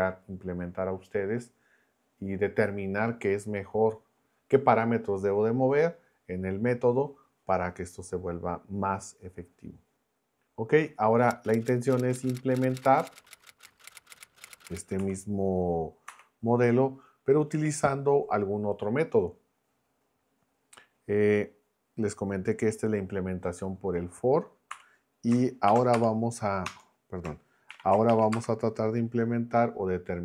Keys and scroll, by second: 24.7 m, 25.7 shift+3, 25.9 space, 26.6 Return, 27.7 shift+3, 28.3 space.